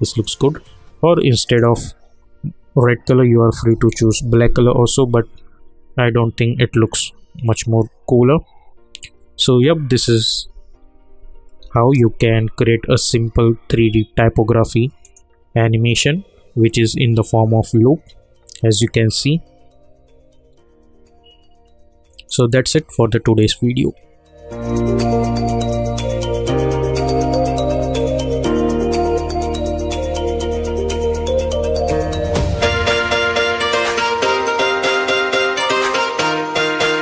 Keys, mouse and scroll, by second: 3.9 ctrl+r, 10.0 ctrl+r, 10.3 ctrl+z, 11.6 ctrl+r, 15.0 click, 22.1 click.